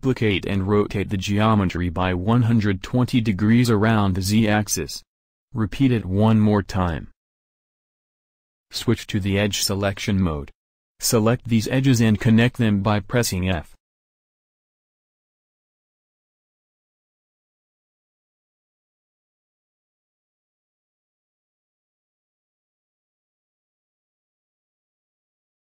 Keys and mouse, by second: 0.5 shift+d, 2.8 click, 4.3 click, 4.8 click, 6.6 a, 7.7 z, 11.4 z, 13.0 middle click, 13.2 click, 13.8 middle click, 14.6 click, 15.2 middle click, 16.7-18.6 middle drag, 24.2 f, 24.4 a.